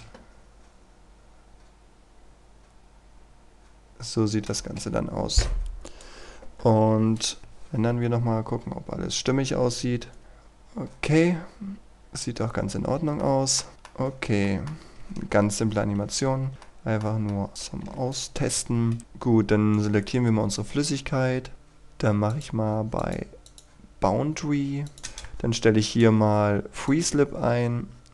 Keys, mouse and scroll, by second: 0.6-1.8 scroll down 1, 4.6 shift+space, 5.9 click, 7.4 F12, 8.3-8.9 scroll down 1, 10.6-11.6 scroll up 1, 11.6 scroll down 1, 11.8-12.8 scroll up 1, 12.8 Escape, 13.2 middle click, 14.1 scroll down 1, 14.5 shift+middle click, 14.8 scroll up 1, 15.6 ctrl+Right, 16.1 ctrl+Right, 16.7 middle click, 18.2 click, 19.3-19.8 scroll up 1, 19.8 right click, 20.2-21.5 scroll up 1, 21.5-22.4 scroll down 1, 22.4 click, 25.0 KP_2, 25.1 Return, 26.0 click.